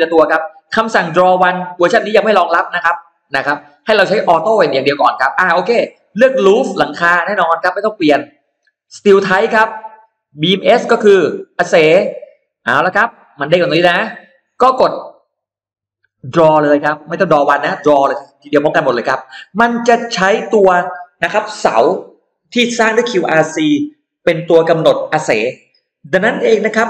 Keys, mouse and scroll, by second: 6.0 click, 6.5 click, 9.0 click, 10.7 click, 12.9-14.3 drag.